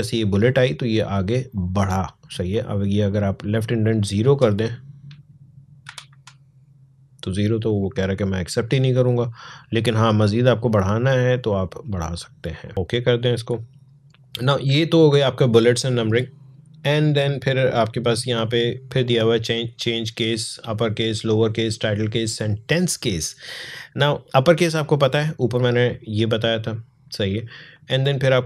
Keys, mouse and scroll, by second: 2.9-5.7 drag, 5.7 0, 5.9 Tab, 7.4 click, 16.1-17.8 scroll down 1, 17.8-19.4 drag, 24.2 click, 27.5 click.